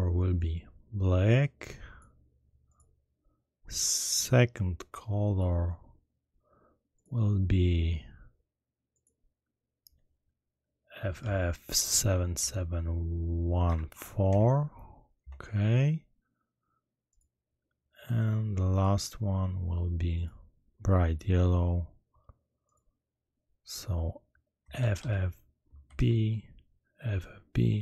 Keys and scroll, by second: 11.2-12.3 typing, 13.6-14.2 typing, 15.1 Return, 24.7 shift+f, 25.8 b.